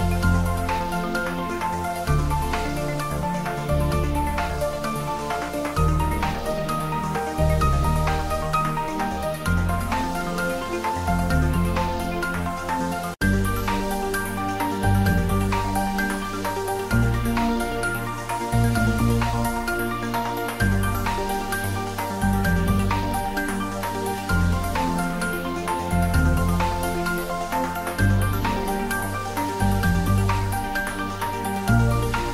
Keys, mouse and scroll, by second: 0.1-1.7 middle drag, 1.7 shift+click, 1.7 shift+click, 2.0 middle click, 2.4 ctrl+middle click, 2.9 shift+middle click, 3.7 click, 5.0 3, 5.2 click, 5.6 shift+click, 6.9 middle click, 7.9 shift+click, 8.6 shift+middle click, 9.1 shift+click, 10.7-12.4 middle drag, 12.4 i, 14.6 click, 14.8-16.0 typing, 17.2 click, 17.6-20.0 middle drag, 20.0 ctrl+middle click, 20.3 shift+middle click, 20.8 middle click, 21.7 shift+middle click, 22.6 ctrl+middle click, 25.0 click, 25.2 ctrl+z, 25.8 alt+e, 26.1 click, 29.0 click, 29.1 Tab, 29.4-31.5 middle drag, 31.5 shift+middle click, 31.8 ctrl+middle click, 32.2 Tab.